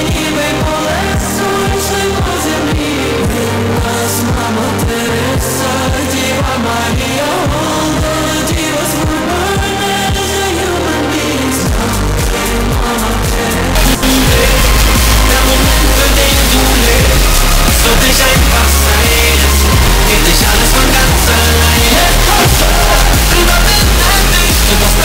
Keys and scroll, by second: 1.8 c, 2.1-2.6 Down, 2.9 Down, 3.0 Down, 3.2 Return.